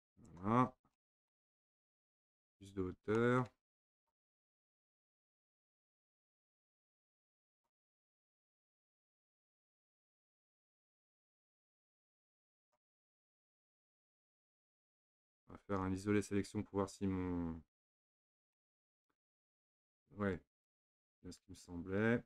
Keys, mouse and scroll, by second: 1.0-2.1 middle drag, 2.1-3.2 scroll up 1, 3.2-4.0 middle drag, 4.0 click, 4.4-5.3 middle drag, 5.3 click, 7.8 middle click, 8.2-8.8 scroll up 1, 8.8-9.4 middle drag, 9.4-9.7 scroll down 1, 9.7 middle click, 10.4-11.6 scroll down 1, 11.6 click, 13.0-16.0 middle drag, 16.4 KP_Divide, 18.0 KP_Divide, 18.6-20.6 middle drag, 20.6 click.